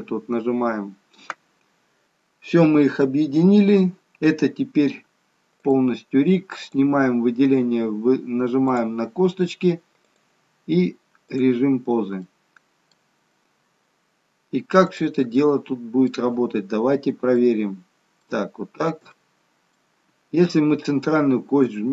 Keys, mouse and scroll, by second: 2.0 middle click, 2.0-2.8 scroll up 1, 5.6 click, 6.6 click, 8.7 click, 10.0 click, 11.9-12.3 scroll down 1, 12.3 middle click, 15.0 click, 15.4 middle click, 17.5 shift+middle click, 18.5-18.9 scroll up 1, 19.1 shift+middle click, 19.1-19.8 scroll up 1, 21.8 g.